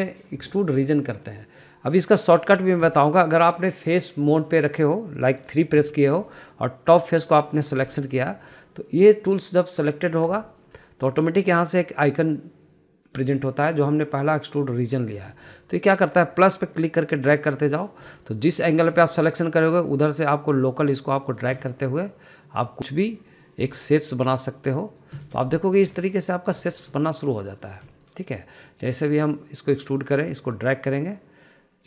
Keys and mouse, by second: 2.8 middle click, 3.4 middle click, 3.6 click, 4.3 middle click, 5.8 middle click, 6.6 3, 7.7 click, 8.3 middle click, 8.7 shift+middle click, 9.0 shift+middle click, 11.2 shift+middle click, 12.3 middle click, 14.1-15.7 drag, 16.1 middle click, 17.6 click, 18.8 middle click, 19.4 click, 19.8 middle click, 20.8 click, 22.0 click, 23.9 middle click, 24.6 middle click, 26.3 middle click, 26.9 shift+middle click, 27.5 shift+middle click, 27.8 middle click, 28.5 click, 28.8 middle click, 29.5 click, 30.6 click, 31.5 click.